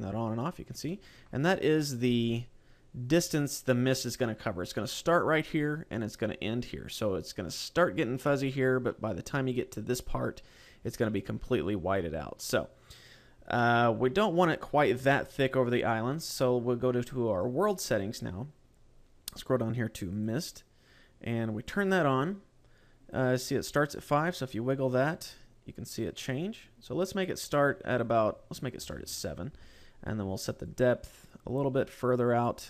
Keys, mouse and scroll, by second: 0.7 middle click, 13.4 middle click, 14.3-14.9 scroll down 1, 14.9 scroll down 1, 17.2 click, 18.5-19.3 scroll down 6, 19.9 click, 20.3-21.0 scroll down 3, 21.5 click, 23.7 click, 27.7 click, 30.5 click.